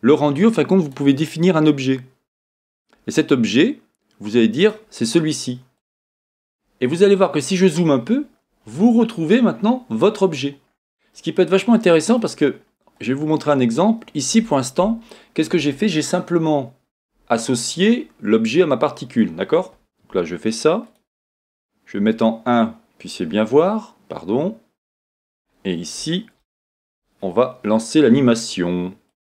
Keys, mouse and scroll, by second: 0.8-4.7 drag, 7.2-8.6 scroll up 1, 8.7-9.4 scroll up 1, 9.4 scroll up 1, 9.5 middle click, 9.5-10.0 scroll down 2, 11.1-20.9 middle drag, 12.5-14.8 scroll down 2, 20.9 click, 22.0 KP_1, 25.3-26.4 scroll down 2, 26.6-29.1 middle drag, 29.1-29.3 drag.